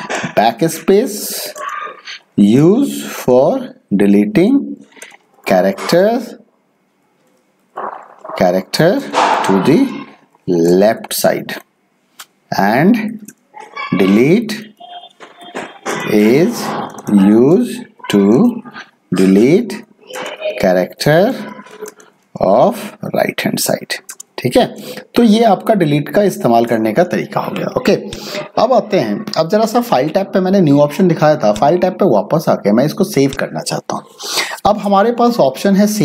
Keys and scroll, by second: 0.0-7.6 typing, 8.6-26.6 typing.